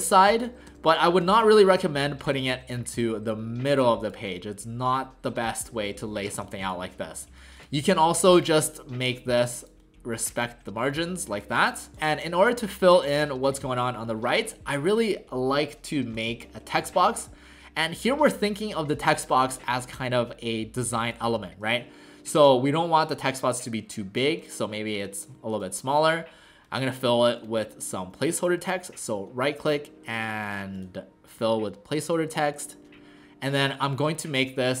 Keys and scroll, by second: 7.1 ctrl+z.